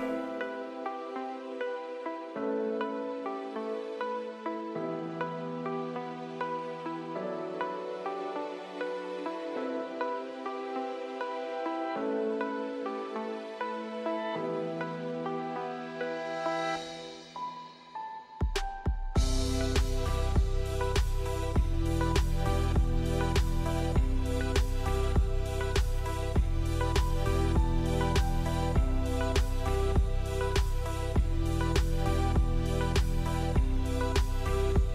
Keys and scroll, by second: 2.2-3.2 typing, 6.2-7.7 typing, 13.1-14.2 typing, 17.6-19.0 typing, 18.0 Tab, 21.2 f, 22.2 2, 23.7 1, 27.5-28.4 typing, 30.3 z, 31.8 p.